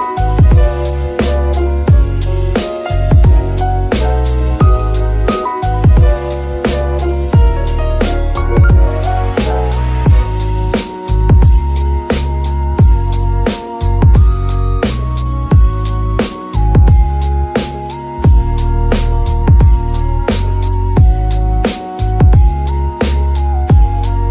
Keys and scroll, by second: 0.1 KP_3, 1.2 Tab, 2.6 c, 5.4 shift+r, 6.5 g, 11.7 g, 17.1 r, 23.1 shift+g, 23.7 Escape, 24.2 KP_7.